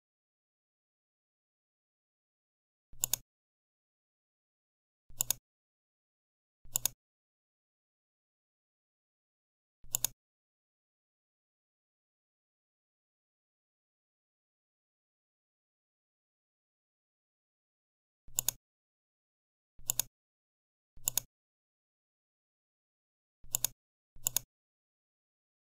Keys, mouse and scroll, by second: 2.8 click, 5.0 click, 6.6 click, 9.8 click, 18.3 click, 19.8 click, 20.9 click, 23.4 click.